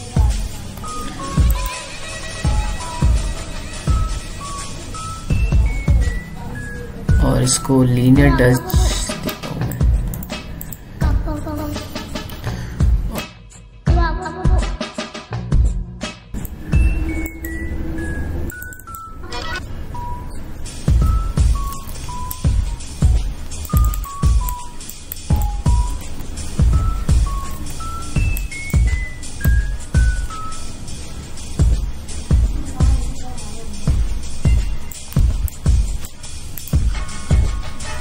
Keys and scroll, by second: 14.9 BackSpace, 15.6 ctrl+l, 15.6 o, 22.6 ctrl+t, 28.3 ctrl+m.